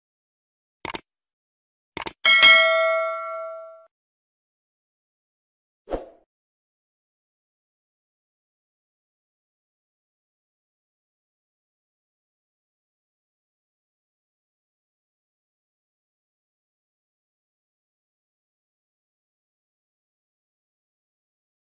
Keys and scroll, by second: 0.9 alt+Return, 3.5 ctrl+s, 3.8 alt+Tab, 15.5 ctrl+c, 19.0 Return, 19.3 ctrl+v, 19.7 ctrl+s, 20.3 ctrl+s.